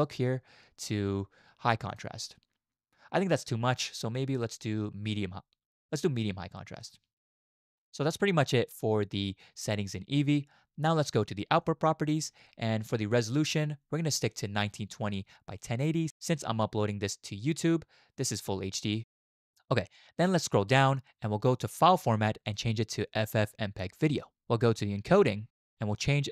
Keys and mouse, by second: 4.5-7.1 drag, 11.6 click, 22.5-24.4 drag, 25.1 click.